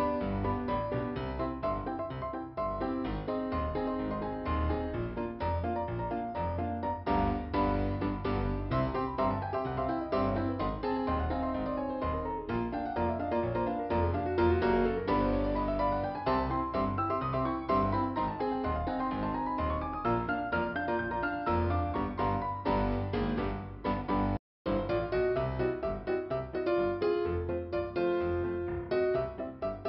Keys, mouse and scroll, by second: 0.4 click, 3.1 click, 3.8 click, 9.4 click, 11.4 click, 12.4 p, 12.9 scroll down 2, 16.7 click, 19.9 scroll down 2, 21.3 scroll up 2, 22.3 click, 24.6 click, 26.4 right click, 27.2 click, 28.3 click, 29.0 click.